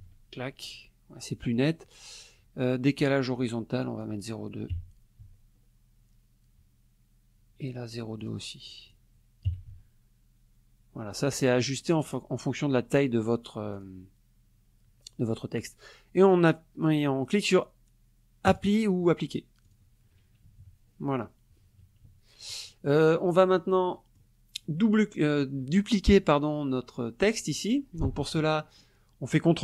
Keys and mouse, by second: 0.0 Tab, 3.4 click, 3.9 click, 4.7 KP_2, 5.2 Tab, 8.2 click, 8.7 click, 9.5 KP_2, 13.7 click, 18.5 click, 19.7 click, 20.5 KP_Subtract, 22.1 KP_Subtract, 22.9 middle click, 23.9 middle click, 27.2-27.9 drag, 28.0 ctrl+z.